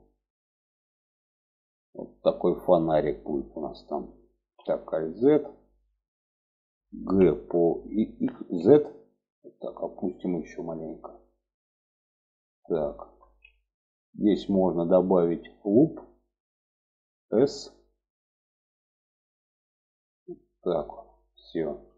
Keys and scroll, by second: 3.9 alt+z, 6.4 g, 12.5 alt+z, 16.7 s.